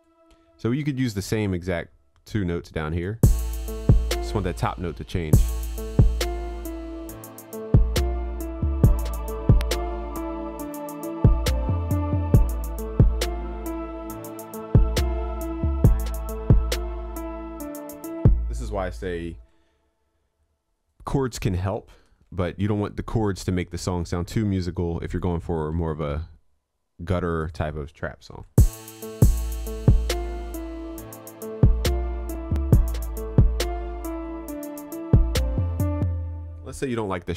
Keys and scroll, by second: 19.4 ctrl+s, 28.3 ctrl+s, 35.0 ctrl+s.